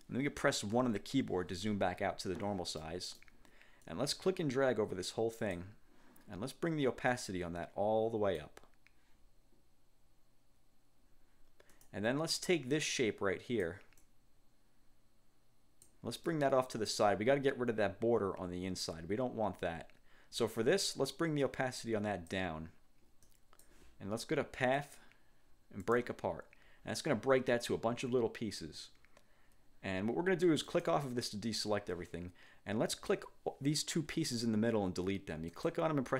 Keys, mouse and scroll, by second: 0.9 1, 2.9 click, 4.0-5.9 drag, 7.3-8.7 drag, 11.9 click, 12.9 click, 14.1-16.1 drag, 16.4 click, 21.5 click, 23.3 click, 24.9 click, 25.9 click, 28.3-29.1 ctrl+scroll up 2, 30.8 click, 33.1 click, 34.2 Delete, 35.7 click.